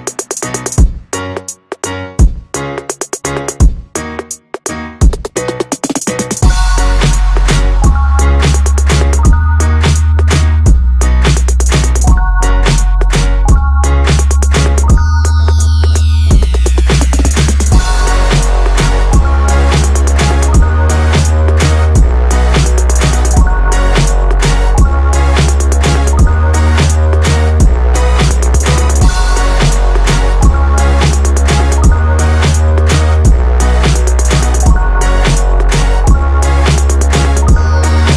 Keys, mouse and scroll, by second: 0.2 click, 7.2 g, 9.7-10.1 scroll up 3, 12.1 click, 12.9-14.4 scroll up 7, 14.4 g, 16.3 scroll down 1, 17.2-18.9 drag, 20.0 click, 23.2-23.6 scroll up 2, 23.6 Tab, 24.1 click, 25.1 click, 26.8 b, 28.0 click, 30.7 click, 31.7 b, 33.8 click, 36.5 click.